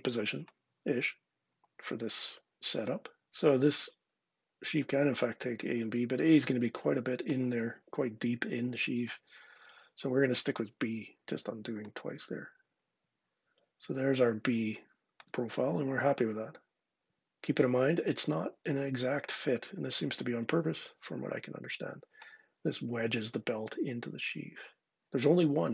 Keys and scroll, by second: 0.9 typing, 8.7 super+z, 9.3 super+z.